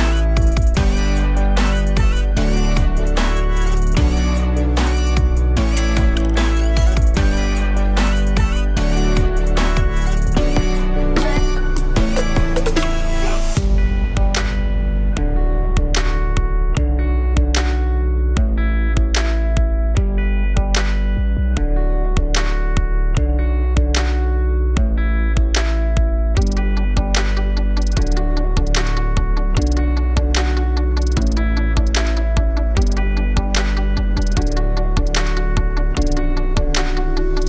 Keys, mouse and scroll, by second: 0.6-1.0 alt+middle drag, 1.0-1.7 scroll up 1, 1.7 click, 2.8-4.8 drag, 4.8-5.8 middle drag, 5.8 click, 6.0 shift+a, 9.8 click, 10.0 shift+a, 13.0-14.0 drag, 14.0-15.8 middle drag, 15.8 ctrl+shift+click, 16.6-17.2 middle drag, 17.2 click, 17.9 ctrl+t, 18.4-19.5 middle drag, 19.5 click, 20.4 middle click, 21.4-22.1 scroll up 1, 22.1-24.7 drag, 27.9-29.1 drag, 29.1 middle click, 29.7-32.2 ctrl+shift+drag, 35.3-37.4 drag.